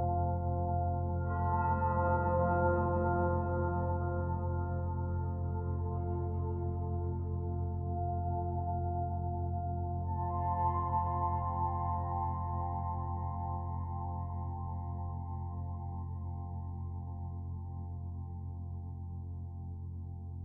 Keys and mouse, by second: 0.6 /, 3.1 Tab, 5.5-6.4 drag, 8.6-9.5 drag, 12.0 click, 13.1 alt+a, 13.6 b, 14.1-18.5 drag, 19.2 v, 19.8 Escape.